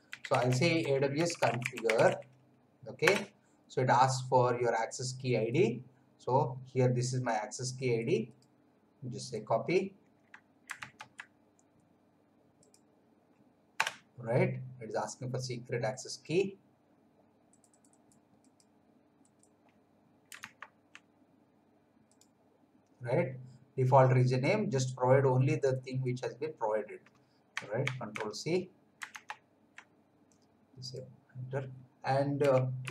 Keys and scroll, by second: 0.0-2.5 typing, 3.0 Return, 10.9 alt+Tab, 13.7 Return, 20.5 alt+Tab, 27.8 ctrl+c, 29.2 alt+Tab, 32.1-32.9 typing.